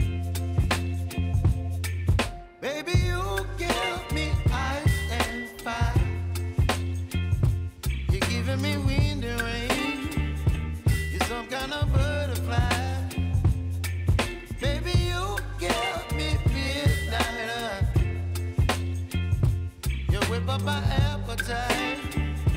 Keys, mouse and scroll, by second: 0.0 space, 2.2 space, 2.6 click, 3.1 u, 4.0 click, 4.3 right click, 8.4-15.6 drag, 15.6 scroll down 1, 16.5 click, 17.5 Return, 19.0 click, 21.3 Return, 22.4-22.5 drag.